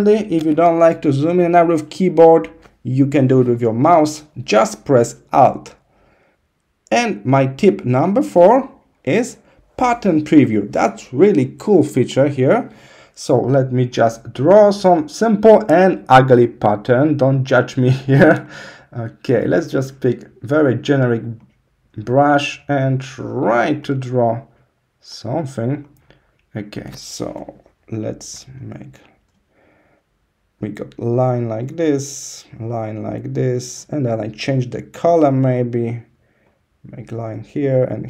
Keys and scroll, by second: 27.2 [.